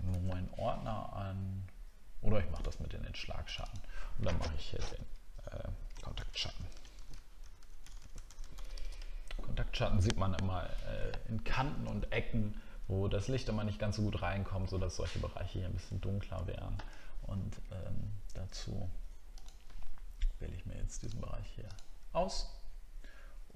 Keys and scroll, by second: 0.1 ctrl+z, 6.2 shift+k, 16.0 alt+scroll up 1.